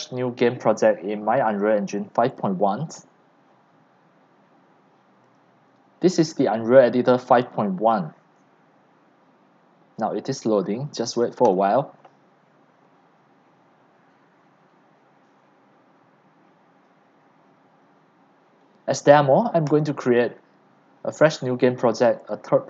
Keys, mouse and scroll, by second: 19.9 click.